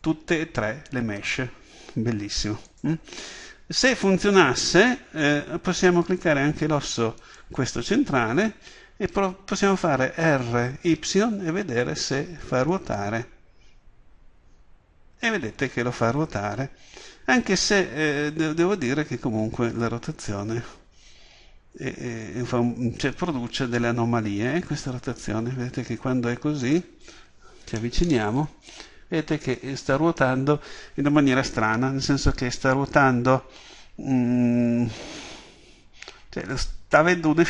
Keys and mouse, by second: 2.8-4.5 drag, 4.5 right click, 10.4 r, 26.8-37.4 drag.